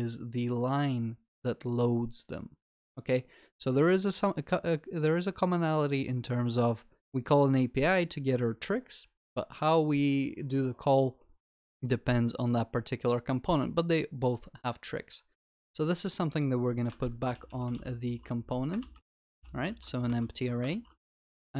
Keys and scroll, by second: 19.8 ctrl+s.